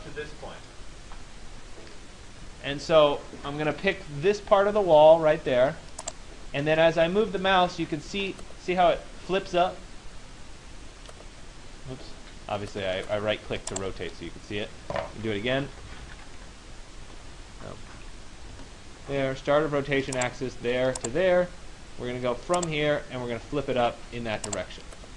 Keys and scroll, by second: 17.4 Escape, 18.6 Return.